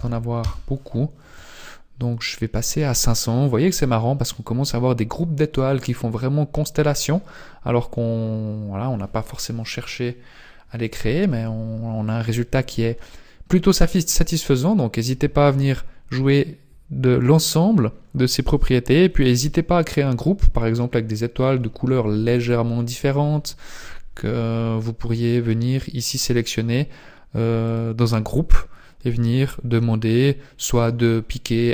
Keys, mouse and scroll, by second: 0.4 click, 0.4 scroll up 8, 0.4 KP_0, 20.3-22.4 scroll down 10, 27.7 click.